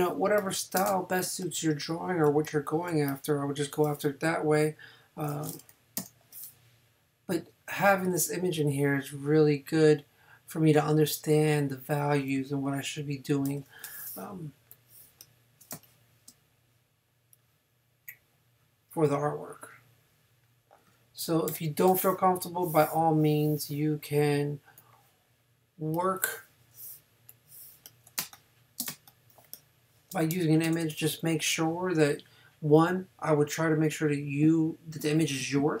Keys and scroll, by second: 0.9 space, 6.0 n, 13.5 super+j, 15.7 super+space, 21.5 super+j, 28.2 super+space, 30.6 super+-.